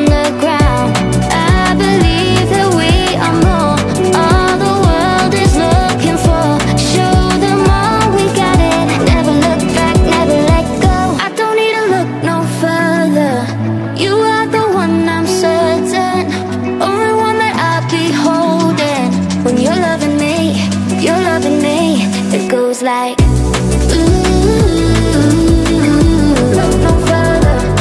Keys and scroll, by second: 0.0-0.8 typing, 22.5 Left, 24.5 Up, 27.1 Down.